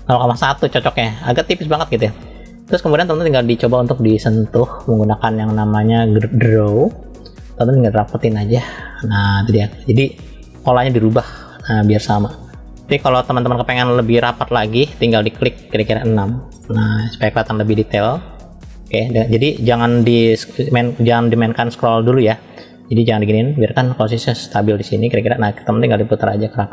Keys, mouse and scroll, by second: 3.7 scroll up 1, 6.6-7.8 middle drag, 6.6 scroll up 1, 8.3 click, 10.4 click, 11.3-14.2 drag, 14.3-17.4 drag, 18.9-20.6 middle drag, 21.0 scroll down 1, 21.5 scroll down 2, 21.9-22.2 scroll down 1, 22.2 scroll down 1, 23.0 scroll up 1, 23.3 scroll down 1, 24.0-24.6 scroll up 2, 25.5 click.